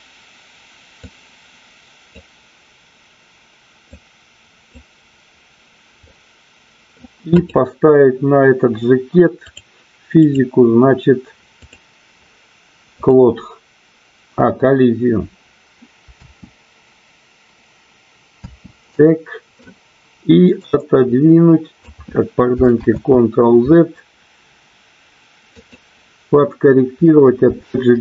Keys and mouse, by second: 1.0-2.4 drag, 4.0 click, 6.1 middle click, 7.4 click, 10.1 click, 13.0 click, 16.3 space, 18.9 space, 19.0-19.6 middle drag, 20.6-21.9 drag, 24.8 ctrl+z, 25.4 click.